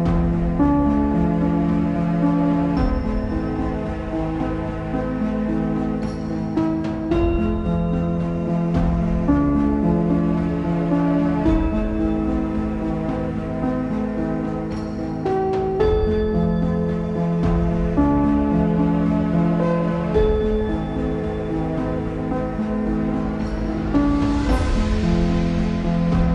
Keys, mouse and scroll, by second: 2.5-4.4 drag, 5.1 click, 5.8 click, 6.0-9.6 middle drag, 9.6 click, 11.6 shift+middle click, 12.0 click, 12.3-12.7 scroll up 3, 12.7-14.9 shift+middle drag, 14.9 shift+a, 15.5-16.1 scroll down 4, 16.1-16.7 scroll down 12, 16.7 s, 18.1 click, 18.3-18.6 scroll up 2, 18.6 r, 20.8-22.0 drag, 22.2-23.6 scroll up 3, 23.6 z, 24.3 click, 25.8 g.